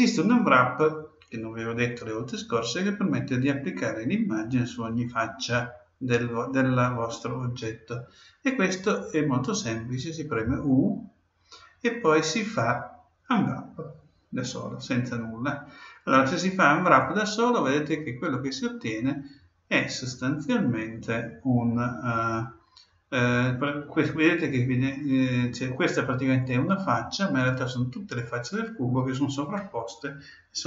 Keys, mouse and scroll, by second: 10.4 u.